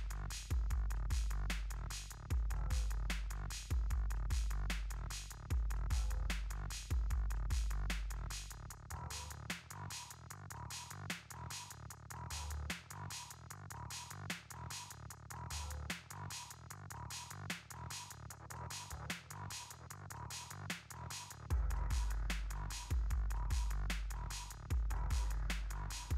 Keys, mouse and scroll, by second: 1.8 b, 3.2-4.3 typing, 7.5 shift+v, 10.6 typing, 12.5 l, 14.6-15.5 typing.